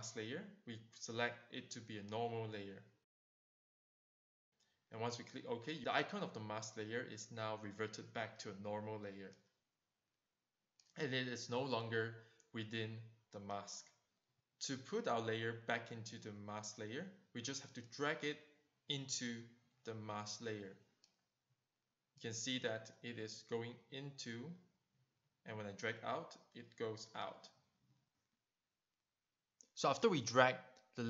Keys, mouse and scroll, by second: 2.8 click, 10.0 click, 11.7 click, 12.5 click, 12.9 click, 15.0 click, 16.7 click, 29.0 click.